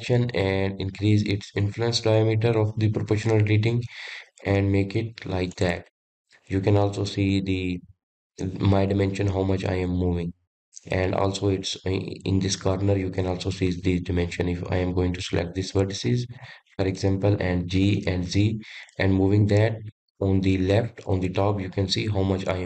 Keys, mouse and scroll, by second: 15.4-17.4 middle drag, 17.4 click, 18.3 g.